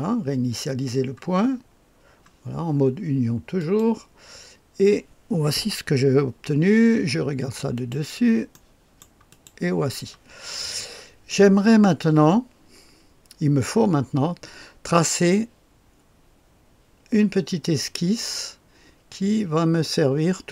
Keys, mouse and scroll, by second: 3.5 click, 7.7 click, 8.5 middle click, 9.2 click.